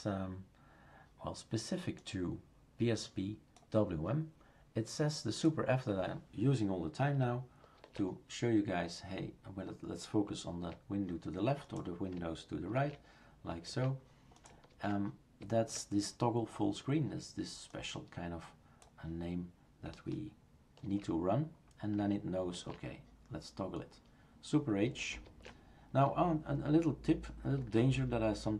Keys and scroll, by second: 7.8 super+f, 12.8 super+f, 13.7 super+f, 14.7 super+f, 20.8 super+f, 22.6 super+f, 25.2 super+f, 27.6 super+f.